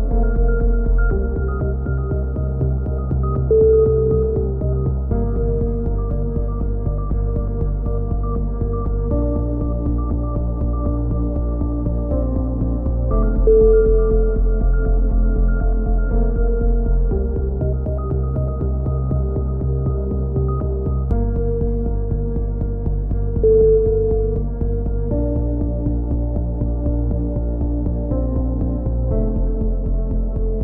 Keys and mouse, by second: 1.6 KP_7, 1.9 z, 3.6-6.3 drag, 5.7 right click, 6.7 v, 7.2-8.8 drag, 7.9-8.9 right drag, 8.9 f, 8.9 z, 9.2 a, 9.7 click, 10.6-12.1 right drag, 11.0 f, 12.0 f, 12.1 a, 13.0 a, 14.2 click, 14.2 KP_3, 14.5 z, 15.1 click, 15.3 click, 17.2 z, 17.4 click, 18.7 ctrl+r, 19.5 a, 19.9 ctrl+r, 20.6 right click, 21.2 alt+m, 22.2-23.9 right drag, 23.4 click, 23.7 x, 24.1 click, 24.1 a, 24.8 right click, 25.1 KP_3, 25.8-26.9 drag, 27.0 right click, 27.2 KP_3, 27.7 click, 28.6 ctrl+z, 29.3 click, 29.3 right click, 29.7 KP_3, 29.8 click.